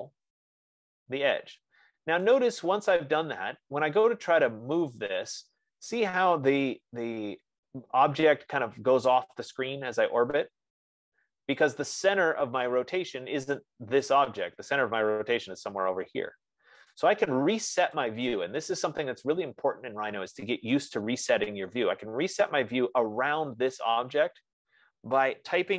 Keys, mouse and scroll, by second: 1.6-2.7 drag, 2.7 right click, 6.7-7.9 right drag, 12.6 right click, 13.0 middle click, 13.8 scroll, 14.5 click, 17.4 click, 18.3 click.